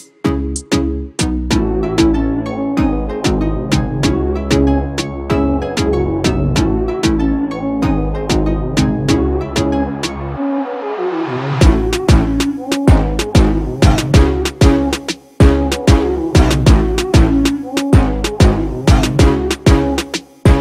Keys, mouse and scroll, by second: 0.9 double click, 3.3 double click, 4.9 ctrl+z, 16.1 double click.